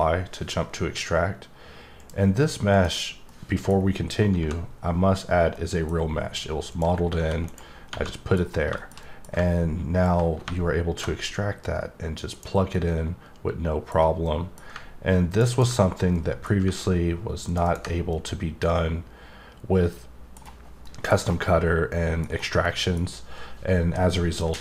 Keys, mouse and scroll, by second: 1.9 click, 2.7 click, 3.3 middle click, 3.7 scroll up 2, 5.5 middle click, 5.9 scroll up 2, 6.7 click, 7.4 right click, 7.8 scroll down 1, 8.1 middle click, 8.4-8.8 scroll down 3, 8.8 middle click, 9.0 double middle click, 10.0 click, 12.3 click, 12.7 middle click, 14.2 middle click, 15.3 click, 15.5 double click, 15.9 scroll down 1, 16.1 middle click, 17.4 click, 17.6 double click, 18.1 middle click, 20.8 middle click, 21.2-21.6 scroll up 2, 21.6 scroll down 1, 21.9 middle click, 22.2 scroll up 1, 22.6 middle click.